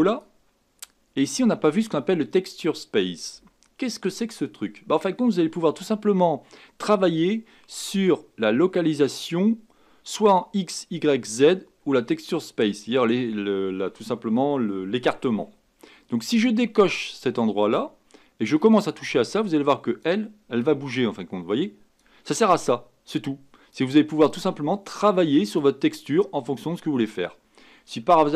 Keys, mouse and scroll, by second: 18.8-28.3 drag.